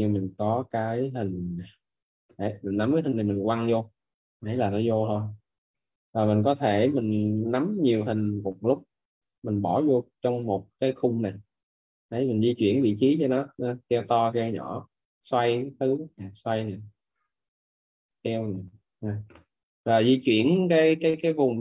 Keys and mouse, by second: 11.5 click, 18.6 click.